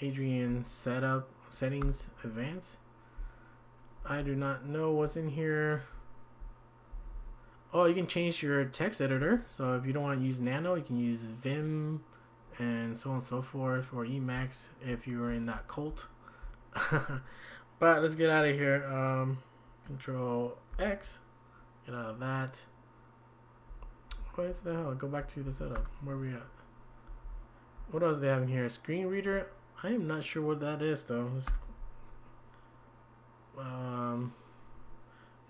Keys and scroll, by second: 1.8 Return, 3.5-5.2 typing, 6.7-7.6 typing, 8.9-9.7 typing, 14.4 Down, 15.9 typing, 20.7 ctrl+x, 23.7 Up, 25.0 Down, 25.1 Down, 25.5 Down, 25.8 Return, 27.1 Down, 27.3 Down, 31.5 Return.